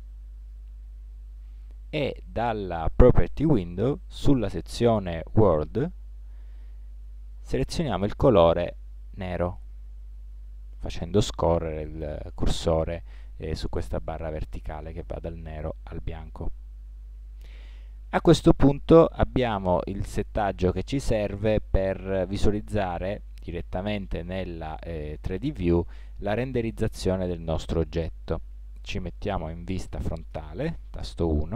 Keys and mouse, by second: 5.5-7.3 drag, 8.7-10.3 drag, 26.8-30.3 middle drag, 30.3 KP_1.